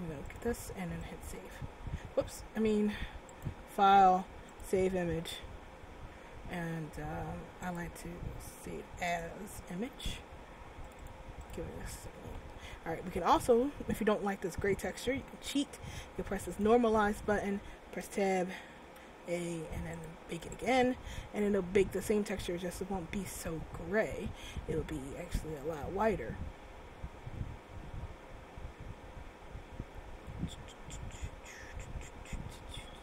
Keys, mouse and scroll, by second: 1.5 click, 3.4 click, 7.8 click, 12.2 click, 15.2-16.7 scroll down 2, 16.7 click, 18.6 Tab, 19.0 a, 20.1 click, 20.7 click.